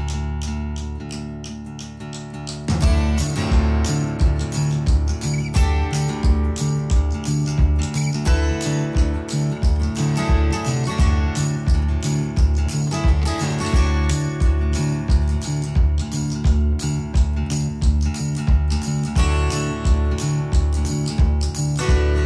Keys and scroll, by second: 0.0 space, 2.2 ctrl+g, 4.1-6.5 typing, 6.2 Return, 6.8 Escape, 14.4 space, 14.7 Escape, 17.4-18.3 typing, 19.6 ctrl+g, 21.1 m.